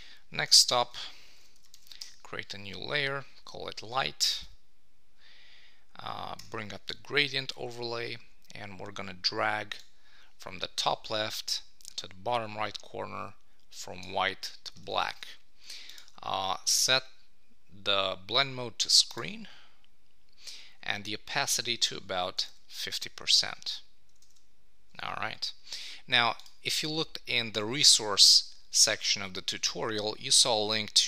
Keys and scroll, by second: 14.8 super+d, 24.2 super+s.